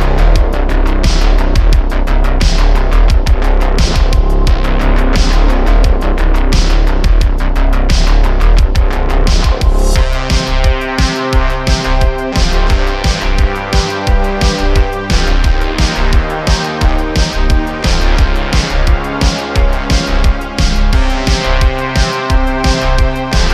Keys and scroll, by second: 1.7 Tab, 3.5 super+b, 5.9 Tab, 6.4 s, 7.3 q, 11.5 1, 13.9 s, 14.1 x, 17.2 Tab, 17.8-19.1 typing, 20.2 e, 21.3 Tab.